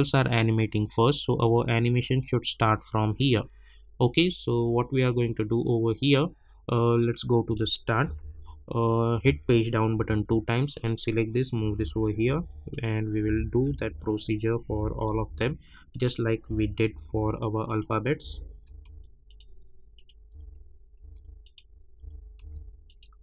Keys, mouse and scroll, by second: 2.0 click, 7.1 click, 8.0 =, 8.2 =, 9.1 =, 9.9 Page_Down, 10.7 click, 12.2 Page_Down, 12.7 click, 13.2 [, 13.6 Page_Down, 14.1 click, 14.6 [, 15.0 Page_Down, 15.9 click, 16.4 [, 16.8 Page_Down, 17.6 click, 18.2 [, 18.6 Page_Down, 19.2 click, 20.3 [, 21.0 Page_Down, 21.4 click, 21.9 [, 22.4 Page_Down, 22.8 click.